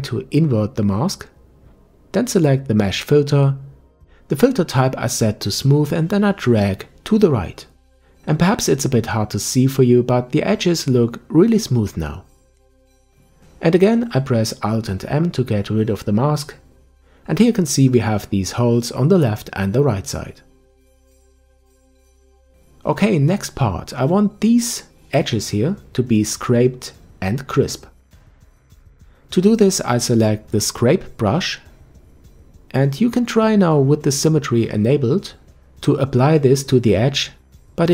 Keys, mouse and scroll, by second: 0.0 ctrl+i, 2.1-4.2 drag, 4.2-5.1 scroll up 3, 5.1 click, 15.0 alt+m, 16.0-16.9 scroll down 3, 16.9-17.8 scroll down 2, 17.8-18.8 middle drag, 19.4 click, 21.7-22.7 middle drag, 23.3 KP_5, 24.1-24.6 scroll up 1, 24.6-26.6 shift+middle drag, 32.1 click, 34.3-37.3 drag.